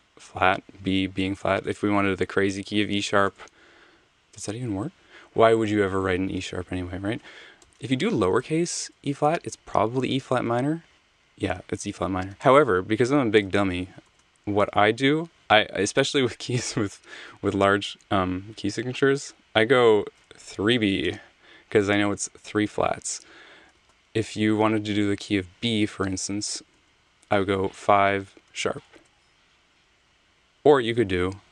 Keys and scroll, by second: 0.0 b, 1.7 BackSpace, 2.6 #, 3.3 Return, 7.3-8.4 typing, 10.4 Return, 12.3 super+z, 14.0 k, 20.1-21.0 typing, 21.0 Return, 23.8 super+z, 26.6 k, 27.8 5, 28.3 shift+3, 29.0 Return, 30.4 super+z.